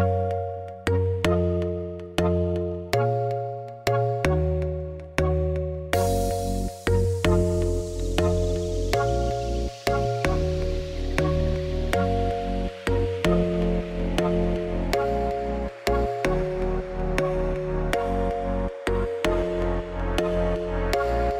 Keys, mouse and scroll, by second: 0.5 u, 0.9-1.7 scroll down 1, 1.7 scroll down 1, 1.8 s, 2.7 a, 3.2 click, 3.5 l, 3.8 g, 4.4 Tab, 4.7-5.1 scroll down 2, 5.1 shift+middle click, 5.4 scroll down 1, 5.6 middle click, 5.9 scroll up 3, 6.1 shift+middle click, 7.1 Tab, 7.3-11.6 scroll down 2, 7.7 shift+middle click, 12.2-13.4 drag, 13.4 h, 14.1 middle click, 14.3 3, 14.6 click, 14.7 x, 15.9 alt+click, 16.8 u, 19.1 a, 19.6 click, 20.0 s.